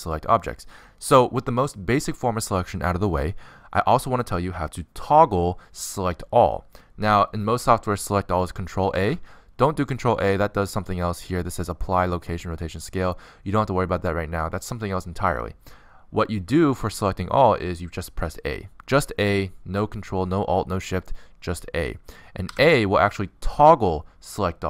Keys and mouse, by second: 10.6 ctrl+a, 23.0 a.